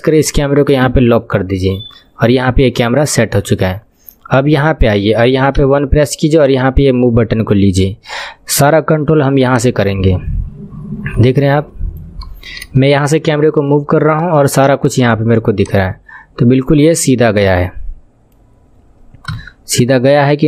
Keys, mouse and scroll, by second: 0.2 click, 0.8 n, 5.6 KP_1, 6.4-8.0 drag, 8.0 scroll down 3, 8.8 shift+middle click, 9.5 click, 9.6 click, 12.7 shift+middle click, 13.3-13.9 scroll down 3, 13.9-15.7 shift+middle drag, 19.3 KP_3.